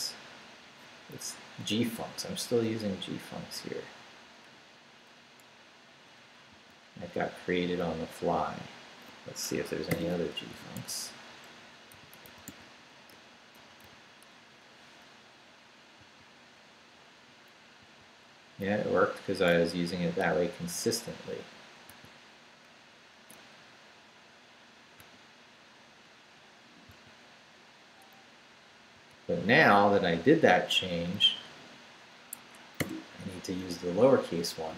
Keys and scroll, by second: 1.2 Right, 5.2 Left, 6.5 x, 7.2 Down, 7.8 Up, 9.4 Escape, 9.9 /, 10.5 g, 10.8 f, 11.9-13.6 typing, 13.1 Return, 16.0 n, 17.0 Left, 17.3 Right, 17.8 n, 18.4 Left, 18.6 Right, 20.2 x, 21.9 n, 25.0 x, 26.9 n, 27.7 Left, 27.8 Right, 32.3 ⟲, 32.8 /.